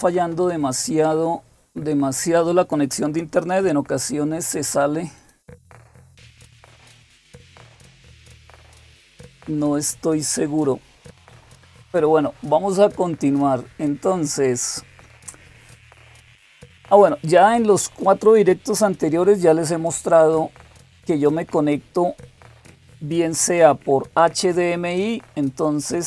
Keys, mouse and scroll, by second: 5.0 click, 13.0-26.0 drag.